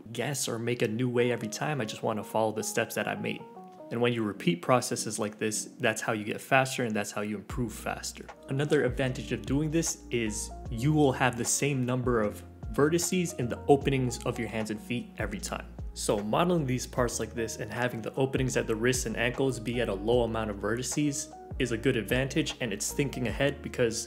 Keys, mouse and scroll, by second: 0.1 ctrl+r, 0.2 click, 0.5 middle click, 0.6-3.6 typing, 0.7 middle click, 0.8 alt+z, 0.9 middle click, 0.9 middle click, 1.1 middle click, 1.1 alt+z, 1.1 scroll up 1, 1.3 middle click, 1.4 click, 1.6 middle click, 1.9 middle click, 2.3 middle click, 2.6 middle click, 2.7 click, 2.7 middle click, 3.0 scroll up 2, 3.0 shift+middle click, 3.2 Tab, 3.2 middle click, 3.4 click, 3.8 Tab, 3.8 middle click, 3.9 alt+z, 3.9 right click, 4.0 click, 4.0 ctrl+s, 4.3 scroll down 3, 4.4 scroll up 4, 4.7 right click, 4.8 Tab, 4.9 right click, 4.9 middle click, 5.9 click, 5.9 middle click, 6.0 ctrl+z, 6.0 ctrl+z, 6.2 scroll up 1, 6.4-9.6 typing, 6.5 middle click, 6.6 alt+z, 6.6 middle click, 6.7 click, 6.8-7.5 scroll down 4, 6.9 alt+z, 7.2 Tab, 7.5 click, 7.6 shift+middle click, 7.6 click, 7.7 click, 8.0 click, 8.1 scroll up 3, 8.1 shift+middle click, 8.2 click, 8.2 middle click, 8.4 click, 8.5 middle click, 8.6 ctrl+z, 8.7 ctrl+z, 8.7 middle click, 8.8 Delete, 8.9 middle click, 9.0 shift+click, 9.1 middle click, 9.1 Delete, 9.2 middle click, 9.2 alt+z, 9.3 middle click, 9.3 middle click, 9.5 shift+click, 9.5 right click, 9.5 click, 9.6 right click, 9.7 right click, 9.8 scroll down 2, 10.1 Tab, 10.2 scroll up 3, 10.3 Tab, 10.4 right click, 10.5 middle click, 10.6 click, 10.8-11.8 ctrl+z, 10.9 middle click, 11.1 click, 11.2 scroll down 1, 11.2 ctrl+z, 11.6 click, 11.7 ctrl+z, 11.9-15.5 typing, 12.2 click, 12.3 click, 12.5 click, 12.7 click, 13.1 click, 13.1 shift+middle click, 13.1 scroll up 1, 13.2 alt+z, 13.2 middle click, 13.3 click, 13.4 right click, 13.6 right click, 13.7 right click, 13.7 scroll down 1, 13.8 click, 13.9 right click, 13.9 middle click, 14.0 Delete, 14.3 ctrl+l, 14.3 click, 14.6 Tab, 14.6 scroll up 1, 14.6 middle click, 14.8 middle click, 14.9 right click, 14.9 right click, 15.0 right click, 15.1 click, 15.2 right click, 15.3 Delete, 15.3 click, 15.4 ctrl+l, 15.6 ctrl+z, 15.9 click, 16.1 click, 16.3 scroll down 2, 16.4 middle click, 16.6 alt+z, 16.7 click, 16.7 scroll up 2, 16.7 shift+middle click, 17.1 click, 17.5 middle click, 17.6 click, 17.7 scroll down 3, 17.7 middle click, 17.8 click, 17.9 middle click, 18.0 click, 18.1 middle click, 18.1 click, 18.3 scroll down 1, 18.3 scroll up 2, 18.3 middle click, 18.5 click, 18.5 middle click, 18.6 click, 18.7 middle click, 19.1 click, 19.1 middle click, 19.2 click, 19.2 middle click, 19.3 click, 19.3 middle click, 19.4 click, 19.4 middle click, 19.6 click, 19.6 scroll down 2, 19.7 right click, 20.0 click, 20.8 scroll down 1, 20.8 click, 21.3 Tab, 21.4-21.7 scroll down 2, 21.5 click, 21.8 scroll up 2, 22.0 click, 22.1 alt+z, 22.3 g, 22.5 g, 22.6 Tab, 22.7 scroll up 1, 22.8 click, 23.0 shift+click, 23.1 g, 23.2 Tab, 23.3 scroll down 3, 23.3 ctrl+s, 23.4 Tab, 23.5 scroll up 2, 23.9 scroll down 3, 24.0 scroll up 4.